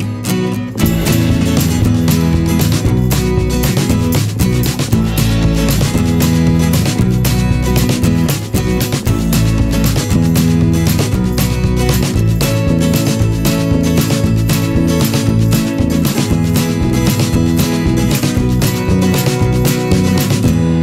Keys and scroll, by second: 4.1 g, 7.2 v, 8.7 g, 9.5 f, 10.9-12.3 typing, 14.3 v, 16.3 ctrl+8, 17.8 g.